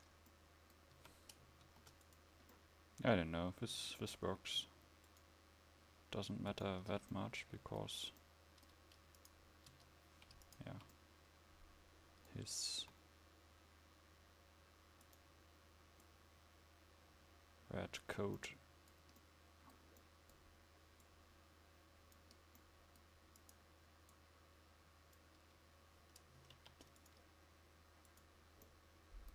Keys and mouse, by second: 0.0 Tab, 1.1 a, 1.7 ctrl+s, 5.2-9.8 drag, 9.8 Tab, 12.9 s, 26.7 ctrl+r.